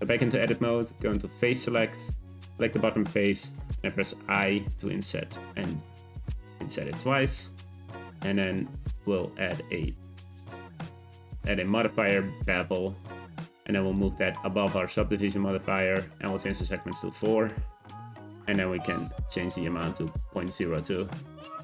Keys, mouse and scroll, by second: 0.1-1.6 middle drag, 1.6 click, 3.6 i, 5.0 i, 6.1 middle click, 6.8 Tab, 7.2 middle click, 7.8 Tab, 8.2 middle click, 8.7 Tab, 12.5 click, 13.9-15.1 drag, 16.5-21.3 drag, 21.5 click.